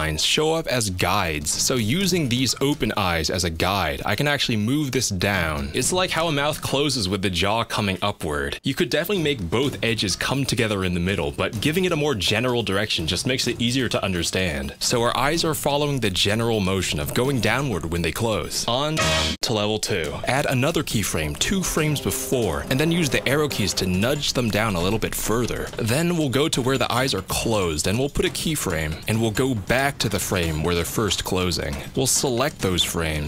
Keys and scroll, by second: 22.6 F6, 23.7 Down, 23.8 Down, 24.0 Down, 24.1 Down, 28.3 F6.